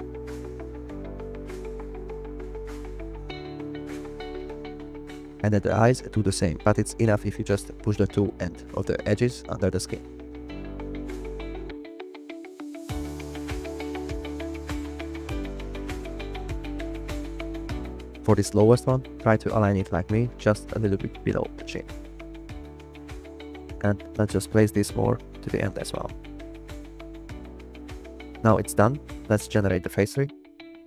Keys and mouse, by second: 0.2 g, 0.4 y, 1.5 click, 5.4 g, 5.6 y, 6.9 click, 8.1 click, 8.6 g, 8.7 y, 9.2 click, 9.3 middle click, 11.0 g, 11.1 y, 11.5 click, 12.9 g, 13.3 click, 18.1 click, 19.5 click, 19.7 g, 25.6 g, 26.4 click, 26.6 middle click, 29.5-30.8 drag.